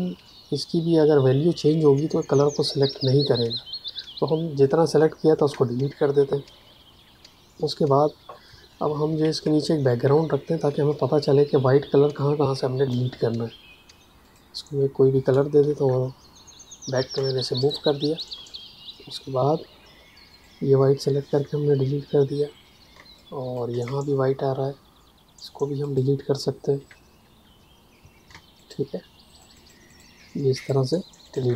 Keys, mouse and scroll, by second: 5.3 Delete, 8.4 ctrl+Num_Lock, 8.8 ctrl+KP_Subtract, 10.0 m, 11.1 click, 17.1 space, 17.5 click, 19.1 a, 20.2 click, 21.2 Delete, 22.9 space, 23.1 click, 23.3 space, 25.8 click, 26.7 Delete, 28.3 space, 28.5 click, 28.7 space, 29.2 click, 29.3 space, 29.5 click, 29.8 ctrl+alt+click, 29.9 space, 30.5 ctrl+alt+click, 30.6 ctrl+alt+space, 31.2 click, 31.3 space.